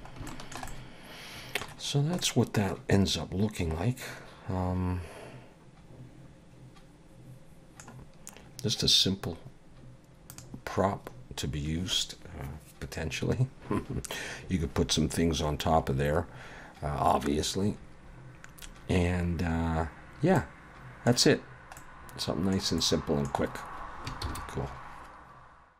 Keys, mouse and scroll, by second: 0.0 scroll up 2, 0.3 shift+middle click, 0.7 middle click, 1.9 scroll down 1, 2.2 middle click, 9.1-9.8 scroll down 1, 10.3 click, 20.4 middle click, 21.4-21.8 scroll down 1, 21.8 middle click, 22.8 middle click, 24.2 ctrl+s.